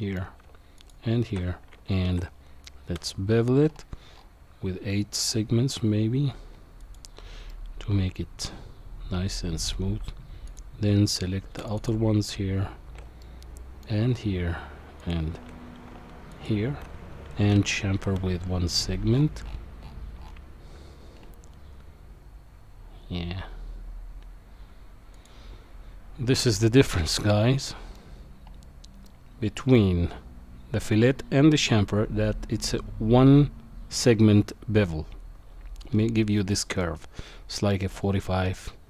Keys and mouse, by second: 0.8 alt+shift+click, 2.0 ctrl+b, 7.5-9.7 middle drag, 10.5 click, 11.6 alt+shift+click, 11.8 alt+shift+click, 13.2 middle click, 15.0 alt+shift+click, 16.3 alt+shift+click, 18.3 ctrl+b, 26.7-28.0 middle drag, 29.0 middle click, 36.5 middle click.